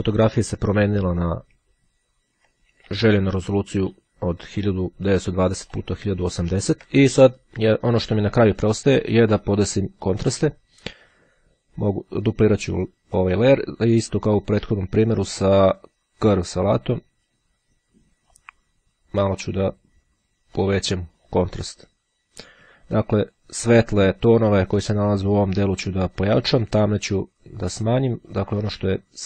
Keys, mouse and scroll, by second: 3.1-4.6 ctrl+middle drag, 4.8-5.1 scroll up 2, 5.1 middle click, 6.4-6.9 ctrl+scroll up 2, 8.7 click, 12.7 click, 15.3 click, 17.1 click, 18.5-20.0 drag, 20.8-24.0 drag, 28.4-29.2 drag.